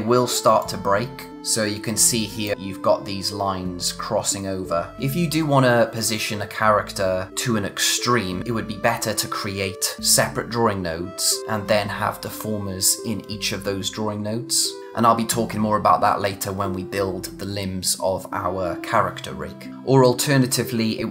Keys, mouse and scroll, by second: 2.5-3.6 scroll up 1, 4.2 scroll down 1.